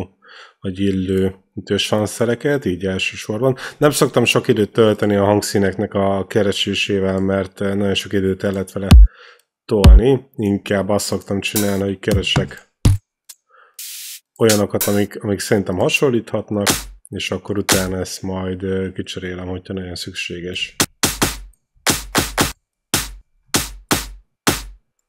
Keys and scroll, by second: 20.7 q.